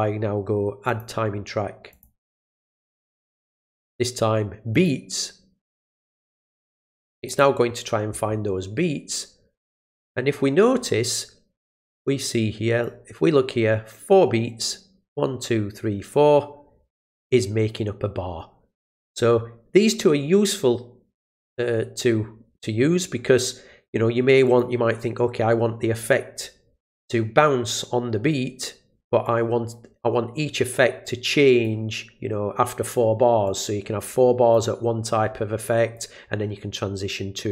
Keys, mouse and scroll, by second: 0.9 click, 1.9 click, 4.7 click, 5.9 click, 7.2 click, 12.8-14.6 drag, 24.4 click, 29.2-31.6 drag, 33.4-34.5 drag, 35.9-37.5 drag.